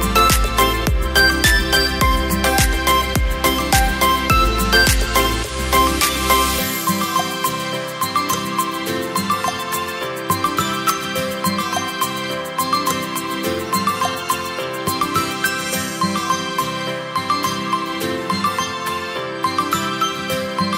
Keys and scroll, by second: 10.9 ctrl+z.